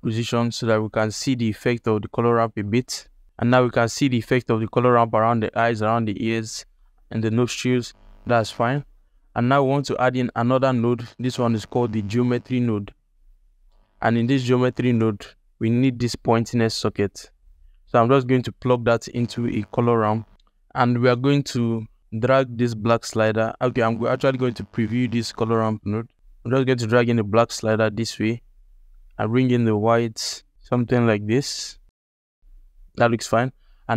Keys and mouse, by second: 9.0 click, 9.7 ctrl+alt+click, 10.3 shift+a, 14.1 ctrl+alt+click, 14.5 alt+shift+click, 16.1-20.3 drag, 22.0-23.4 drag, 25.1 ctrl+shift+click, 26.1 click, 28.5-31.3 drag, 32.2-32.8 ctrl+alt+drag.